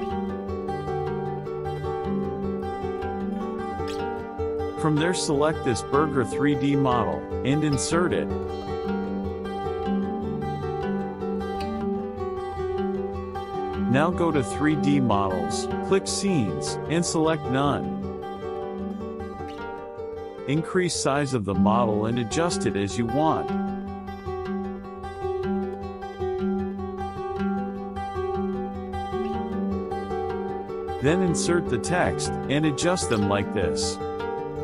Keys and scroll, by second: 8.4 KP_Subtract, 15.2 KP_Add, 17.7 KP_Subtract, 30.9 ctrl+v.